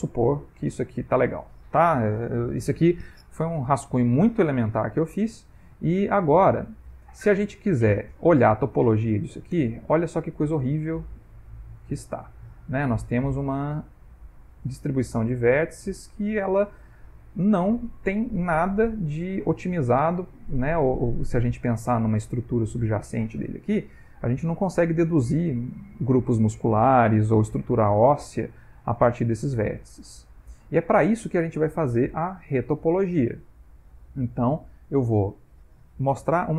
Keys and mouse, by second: 0.1 middle click, 0.7 ctrl+middle click, 1.0 middle click, 5.0 middle click, 5.6 ctrl+middle click, 6.1 middle click, 8.7 middle click, 9.7 Tab, 10.2 ctrl+middle click, 10.8 ctrl+middle click, 11.0 middle click, 12.0 ctrl+middle click, 12.6 middle click, 16.9 ctrl+middle click, 17.6 ctrl+middle click, 18.2 middle click, 18.6 middle click, 19.5 ctrl+middle click, 20.3 middle click, 21.5 Tab, 22.3 middle click, 22.7 ctrl+middle click, 23.2 middle click, 24.1 ctrl+middle click, 24.4 middle click, 25.4 Tab, 28.1 middle click, 28.9 middle click, 29.8 Tab, 30.3 ctrl+middle click, 30.6 ctrl+middle click, 30.8 middle click, 35.9 middle click.